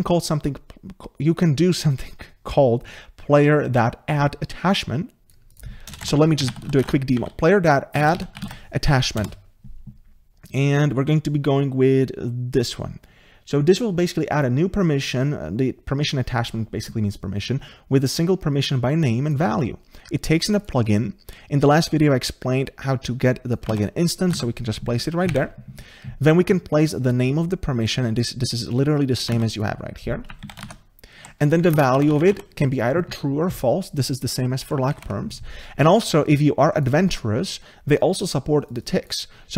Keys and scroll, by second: 23.7 ctrl+c, 24.3 ctrl+v, 29.3 ctrl+c, 30.6 ctrl+v.